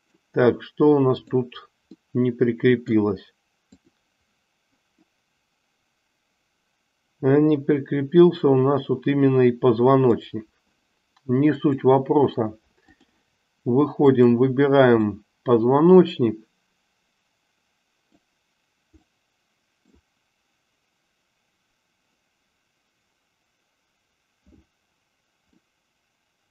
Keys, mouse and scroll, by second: 1.1 click, 1.9-2.9 middle drag, 3.8 click, 5.1-10.1 middle drag, 11.5-13.2 drag, 14.1 click, 15.1-18.2 middle drag, 19.1-20.1 middle drag, 25.6-26.5 middle drag.